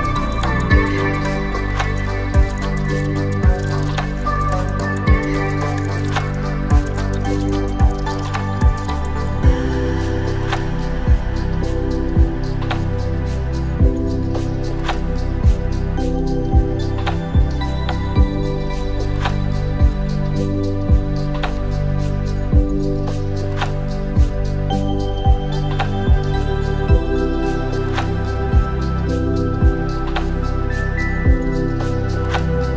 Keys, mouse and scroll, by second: 0.3 KP_1, 2.2-2.7 scroll up 2, 2.9 scroll up 1, 3.0-3.9 shift+middle drag, 4.6 Tab, 5.4 click, 6.4 click, 7.2-8.9 drag, 9.4 click, 10.2-12.0 drag, 12.7 Tab, 13.2 click, 13.6 scroll down 2, 14.4-15.0 scroll down 1, 15.1-16.4 shift+middle drag, 18.8 click, 20.8 click, 22.2-23.1 drag, 24.3-25.0 drag, 25.9-26.7 drag, 27.9 click, 29.1 Delete, 30.4 click, 30.9-32.7 drag.